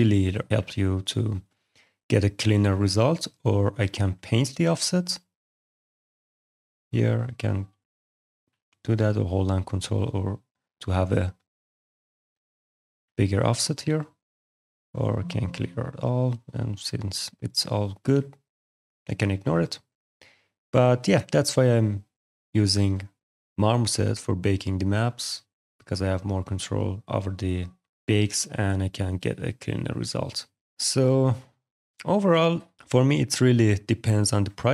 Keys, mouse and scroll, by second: 1.6 alt+click, 2.2 middle click, 2.7 click, 3.3 middle click, 3.7 right click, 4.7 click, 6.1 click, 6.6 alt+click, 7.3 click, 9.1 click, 9.5 ctrl+click, 10.1 ctrl+click, 10.3 click, 10.5 click, 10.9 click, 11.2 click, 12.1 click, 13.1 click, 13.2 click, 14.0 click, 15.8 click, 16.7 click, 18.1 click, 19.2 alt+click, 19.5 alt+right click, 20.8 click, 22.2 alt+click, 22.5 right click, 22.9 click, 23.3 right click, 23.7 middle click, 24.0 click, 24.2 right click, 24.7 middle click, 25.6 click, 28.2 click, 29.4 middle click, 30.7 alt+click, 32.2 alt+click, 33.6 alt+click.